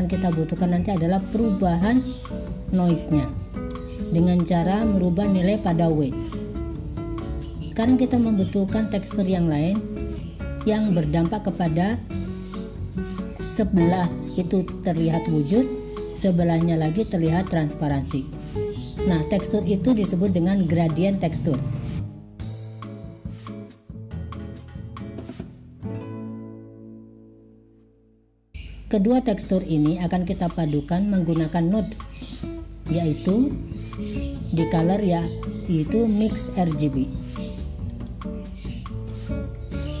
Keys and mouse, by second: 6.1-7.7 drag, 20.3 click, 22.3-27.3 drag, 28.2 click, 32.2-38.2 drag, 39.3-40.0 drag.